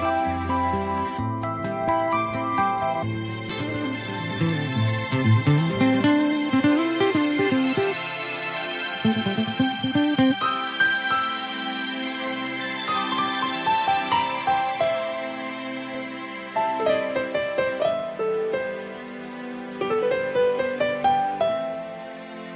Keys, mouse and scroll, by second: 3.4 click, 5.9 click, 13.7 middle click, 18.3 a, 19.5 alt+right click.